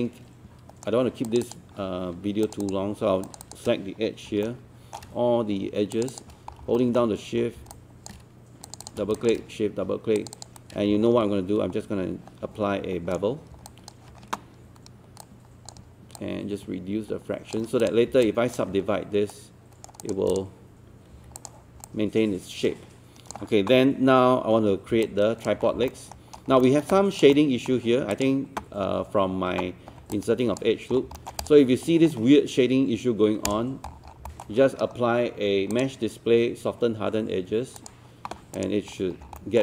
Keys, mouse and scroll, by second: 1.3 click, 2.5 shift+click, 3.3 shift+click, 4.2 scroll down 1, 4.5 alt+middle click, 5.9 shift+click, 6.5 scroll down 1, 6.8 alt+middle click, 7.5 scroll up 1, 7.7 alt+click, 8.7 shift+click, 9.2 alt+click, 10.2 shift+click, 10.6-13.5 shift+right drag, 13.7 alt+click, 15.2-17.7 drag, 18.3 alt+click, 19.3 right click, 20.0 click, 21.1 click, 21.4 click, 21.9-23.7 alt+drag, 25.1 alt+click, 25.7 scroll down 1, 25.9 alt+middle click, 26.2 scroll up 1, 26.6 alt+middle click, 26.9 click, 27.3 alt+middle click, 28.1 click, 30.1 alt+click, 30.9 scroll down 1, 31.2 alt+middle click, 31.4 click, 31.9 scroll up 1, 33.5 click, 33.9 scroll down 1, 34.3 alt+middle click, 35.7 click, 38.9 scroll up 1, 39.4 alt+middle click.